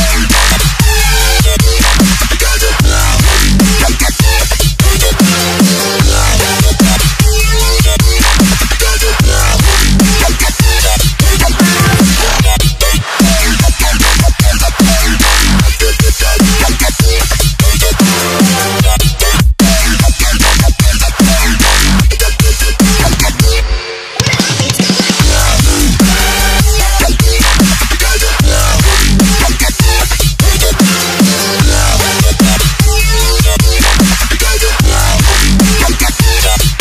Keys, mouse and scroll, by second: 11.6 alt+Tab, 12.4 click, 13.2 c, 13.4 alt+Tab, 14.2 v, 15.2 click, 18.2 alt+Tab, 19.2 click, 20.0 alt+Tab, 20.6 click, 22.0 v, 22.8 click, 27.8 Left, 30.0 ctrl+t, 30.4 click, 31.3 Return, 33.6 s, 36.6 click.